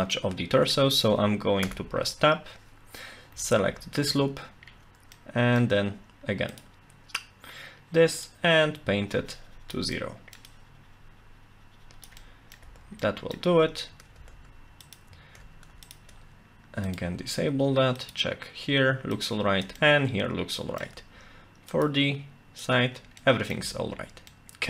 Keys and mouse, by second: 0.1 middle click, 1.7 Tab, 4.1 Tab, 5.2 middle click, 6.5 click, 8.3-9.7 drag, 10.0 middle click, 10.5-12.1 drag, 12.2 middle click, 12.7 Tab, 13.0 middle click, 14.2 Tab, 14.9 shift+click, 15.8 shift+click, 16.8 click, 19.1 shift+click, 19.8-20.8 middle drag, 21.7 shift+click, 23.2 middle click, 24.3 Tab, 24.4 middle click.